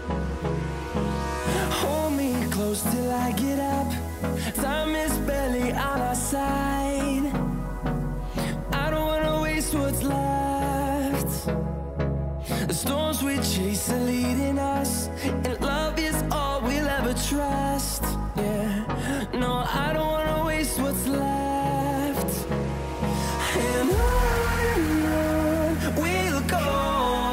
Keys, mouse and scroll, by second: 3.5-6.2 drag, 3.5 typing, 7.2 scroll down 1, 10.0 scroll up 1, 11.0 scroll down 1, 11.1 typing, 12.0-14.2 drag, 15.6 ctrl+r, 16.3 click, 17.1 ctrl+r, 17.7 scroll up 1, 18.4-20.0 drag, 20.0 Delete, 21.2-23.3 drag, 23.3 scroll down 1, 23.9-25.1 scroll, 25.1-27.3 drag.